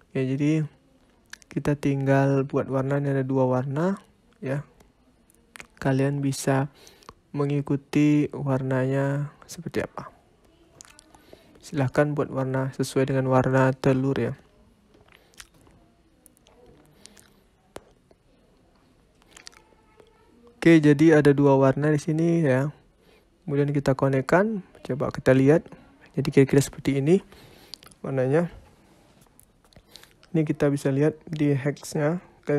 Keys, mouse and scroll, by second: 0.5 middle click, 1.4 scroll down 3, 1.7 middle click, 5.3 shift+a, 6.6-7.5 scroll up 4, 7.5 click, 11.6 click, 15.5 click, 19.0 scroll down 4, 19.3 middle click, 21.4 click, 25.6 click, 26.4-26.8 scroll up 5, 27.2 scroll down 4, 27.8 scroll up 2, 28.5 click, 29.9 click.